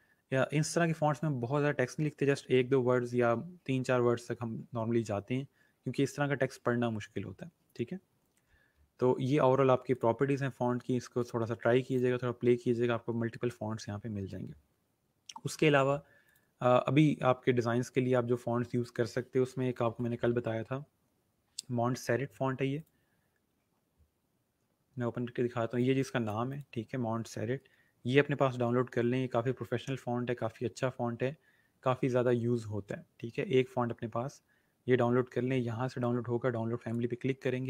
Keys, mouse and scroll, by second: 0.3 scroll down 1, 8.1 scroll up 1, 9.9 click, 12.2 scroll down 1, 14.0 scroll up 1, 16.2 click, 19.5-20.8 typing, 22.7 click, 25.7 click, 28.3 scroll down 1, 31.9 scroll up 1, 36.8 click.